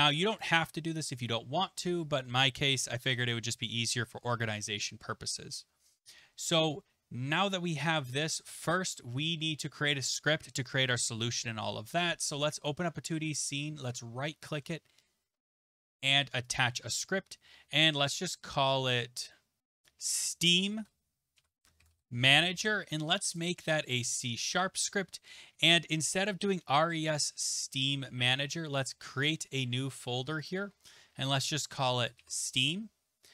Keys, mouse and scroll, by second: 0.4 click, 12.7 click, 13.9 right click, 17.1 click, 19.6 click, 19.9 click, 20.7-22.9 typing, 23.4 click, 24.0 click, 28.3 click, 29.6 right click, 30.5 click, 31.6-32.8 typing.